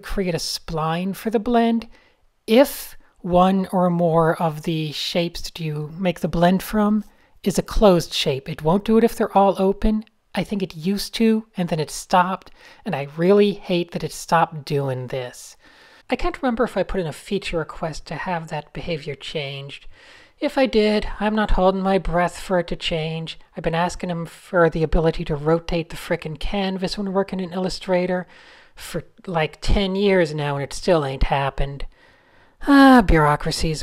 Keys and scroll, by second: 0.8-1.2 Up, 1.2-2.3 typing, 4.6 shift+s, 5.1 super+t, 5.6 p, 8.9 Tab, 9.9 Escape, 9.9 f, 10.1 shift+super+a, 12.5 shift+i, 13.0 super+z, 13.5 a, 19.5 super+y, 20.0 super+y, 20.1 Tab, 23.2 shift+super+a, 23.4 super+0, 23.7-24.3 typing, 23.8 super+space, 23.9 super+space, 24.1 super+space, 24.1 Tab, 25.6-28.2 typing, 29.8 super+z, 31.2 super+z, 32.3 super+z, 33.6 a.